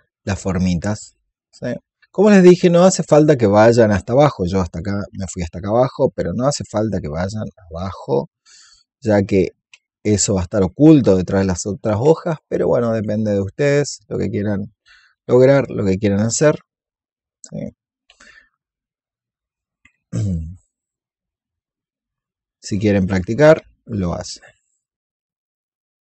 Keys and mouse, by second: 0.7-2.1 drag, 3.2 alt+click, 4.1 shift+click, 5.2 click, 5.7-8.9 alt+drag, 9.8 shift+click, 12.6 click, 13.1 alt+click, 14.1 click, 14.8 alt+click, 18.2 shift+click, 20.5 alt+click, 21.7 click, 22.7 alt+click, 23.7 click, 24.5 shift+click, 25.2 click, 25.4 alt+click, 25.8 click.